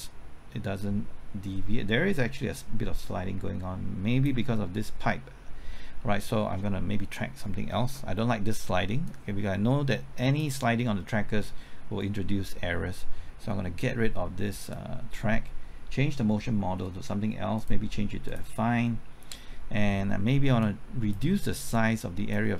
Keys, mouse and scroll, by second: 16.3 middle click, 17.5 click.